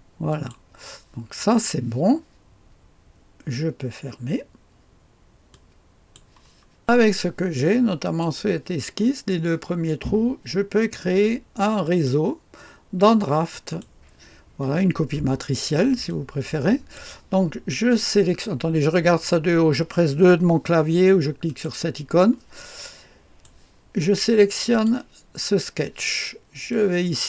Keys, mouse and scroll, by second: 0.3 click, 5.5-6.6 drag, 8.0 click, 11.8 click, 13.5-14.5 drag, 14.9-16.0 scroll down 1, 16.0 click, 21.4 click, 22.5 right click, 24.7 click, 25.2 click, 26.7-27.2 drag.